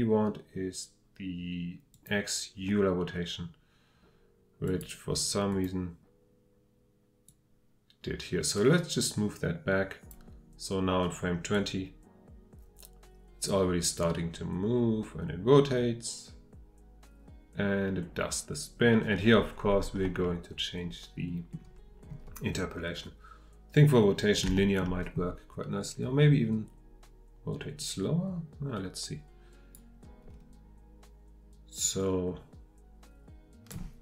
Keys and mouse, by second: 11.8-20.2 drag, 20.2-22.1 middle drag, 24.5-24.8 shift+drag, 27.8-29.7 drag.